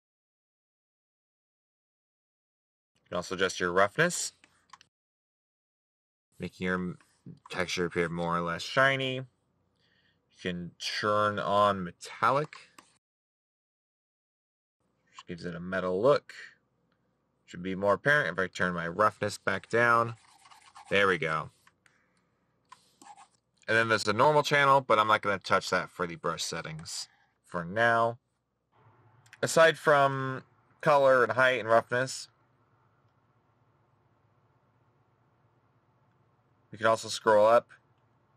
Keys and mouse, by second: 1.8 middle click.